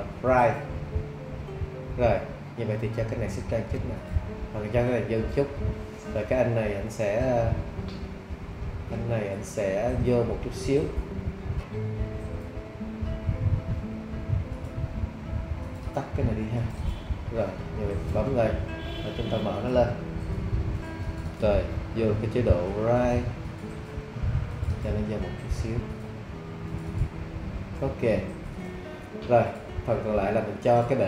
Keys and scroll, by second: 22.7 `.